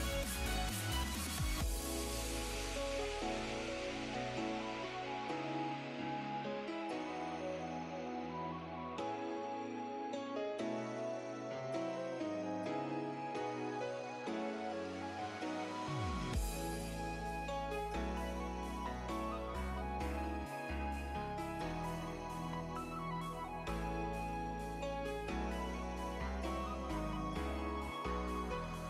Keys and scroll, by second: 0.1 s, 0.5 s, 1.6 s, 19.1 s, 21.3 s, 25.6 s.